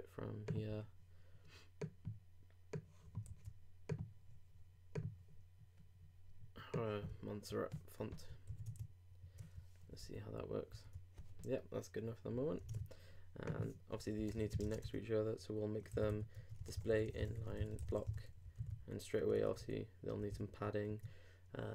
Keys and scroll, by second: 3.3 super+c, 8.5 super+s, 8.7 super+Tab, 10.0 super+r, 12.7 super+Tab, 14.6 shift+[, 14.8 shift+Return.